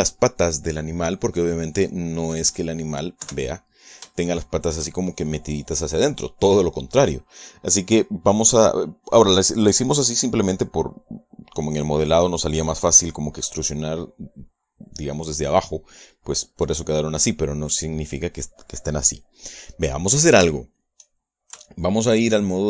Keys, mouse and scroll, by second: 2.1 middle click, 2.8-3.8 middle drag, 3.9 KP_1, 4.8 shift+middle click, 20.1-21.3 middle drag, 21.4 shift+middle click.